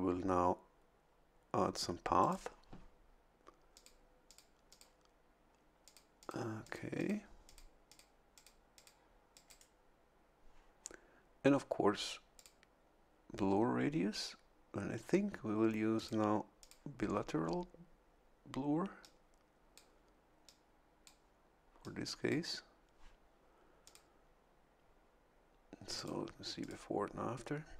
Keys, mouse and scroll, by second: 2.2 click, 3.7 click, 4.2 click, 4.7 click, 5.8 click, 6.2 click, 6.6 click, 7.4 click, 7.9 click, 8.3 click, 8.7 click, 9.3 click, 9.5 right click, 12.3 click, 15.9 click, 16.6 click, 19.0 click, 20.4 click, 21.8 click, 23.8 click, 25.9 click, 26.6 click.